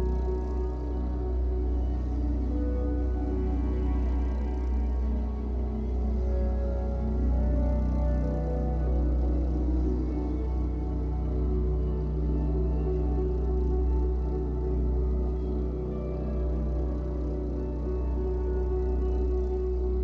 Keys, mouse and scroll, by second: 1.6-4.0 middle drag, 2.4 scroll up 1, 4.0-5.8 drag, 5.3 f, 6.2 f, 6.8-11.9 drag, 11.9-15.2 middle drag, 15.2-16.9 drag, 16.9-18.8 middle drag, 18.8-20.0 drag.